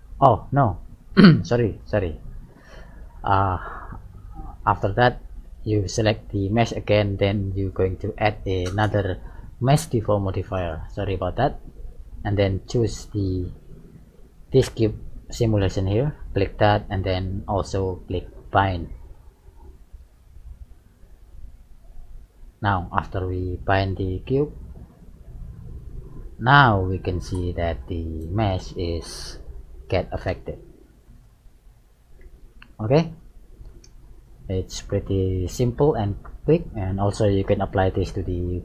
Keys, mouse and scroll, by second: 0.7-1.0 scroll up 2, 2.1 click, 2.6 click, 4.1 middle click, 6.0 right click, 8.3 click, 9.8 click, 11.0 middle click, 12.7 click, 18.2 click, 22.5 middle click, 24.3 right click, 25.6 click, 27.1 g, 31.5 right click, 32.5 g, 34.6-35.5 scroll down 3, 35.5 middle click, 35.5 scroll up 1, 38.2 middle click.